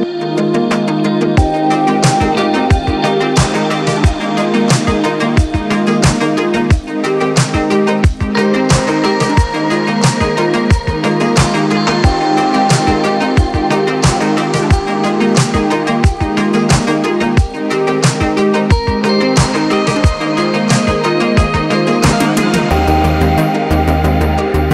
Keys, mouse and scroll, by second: 0.1-0.8 middle drag, 0.8-2.1 scroll up 2, 2.1 middle click, 2.9-3.3 scroll up 4, 3.3 middle click, 4.0 click, 4.6-5.8 scroll down 2, 5.8 g, 10.6-10.9 scroll down 2, 10.9 click, 11.3-11.9 middle drag, 11.9 scroll down 2, 12.0-14.7 middle drag, 15.0-20.2 middle drag, 21.6 shift+s.